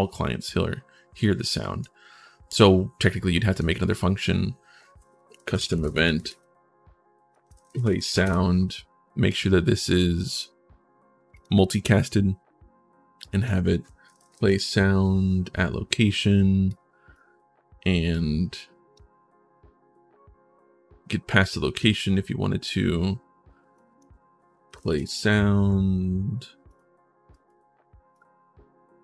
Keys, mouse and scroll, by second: 1.4 right click, 3.3 right click, 4.7-5.9 typing, 7.1-8.4 typing, 9.1 click, 10.1 click, 11.1 click, 13.0 click, 13.7-14.9 typing, 15.9 click, 16.4 click, 17.9 click, 21.2 click, 23.5 click, 24.3-25.4 typing, 26.5 click, 27.1 click, 27.9-29.0 drag.